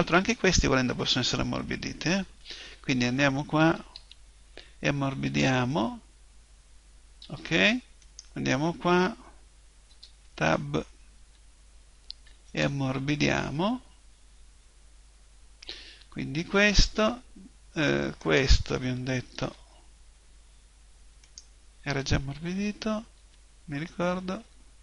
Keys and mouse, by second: 0.1-1.7 right drag, 1.7 Tab, 1.7 middle click, 3.6 a, 3.9 a, 5.3 click, 7.2 Tab, 8.0 right click, 9.9 Tab, 10.3 a, 11.2 a, 12.5 click, 15.3-18.3 middle drag, 18.3 right click, 19.3 Tab, 20.1 middle click, 21.3 right click, 22.5 a, 23.0 middle click, 23.2 a, 24.4 a.